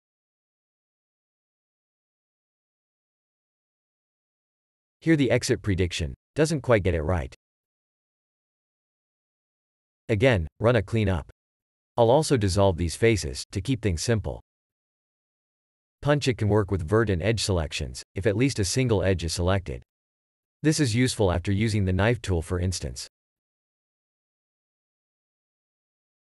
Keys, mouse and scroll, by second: 0.1 click, 2.1 shift+e, 9.2 click, 10.1 click, 10.9 3, 11.6 Tab, 11.9 c, 12.8 Escape, 13.2 ctrl+x, 14.1 Tab, 14.5-15.1 scroll down 1, 15.4 a, 15.7 3, 17.1 3, 18.1 Tab, 18.7 2, 24.3 scroll down 1.